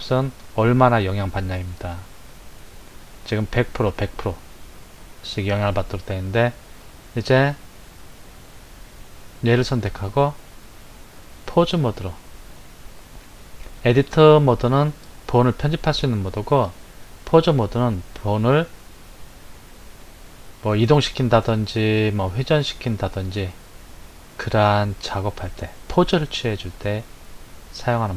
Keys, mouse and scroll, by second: 9.4 click, 11.4-14.6 drag.